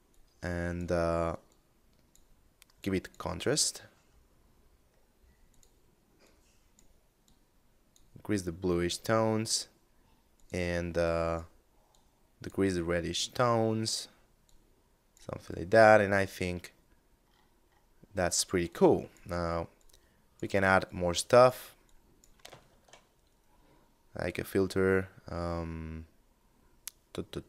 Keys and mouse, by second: 3.3 middle click, 4.6 click, 13.5 click, 14.6 middle click, 17.1 middle click, 17.8 click, 21.8 shift+a.